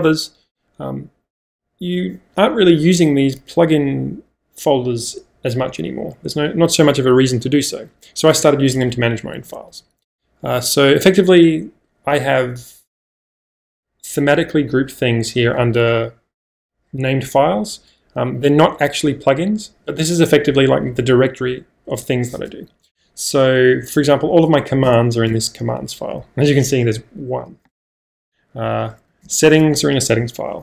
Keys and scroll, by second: 5.0 k, 5.5 k, 5.8 k, 6.0 k, 9.4 j, 9.5 j, 9.7 j, 10.5 j, 13.0 o, 22.4-23.1 typing, 24.9 Return, 27.9 -, 29.0 j, 29.3 Return.